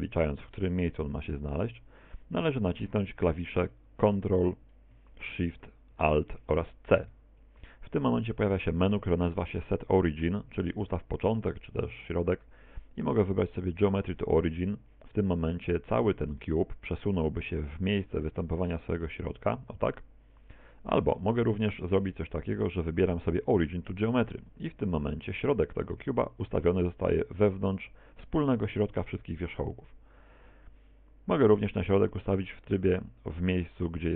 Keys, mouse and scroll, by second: 1.3 middle click, 1.6 z, 7.1 ctrl+alt+shift+c, 21.2 ctrl+z, 22.4 ctrl+alt+shift+c.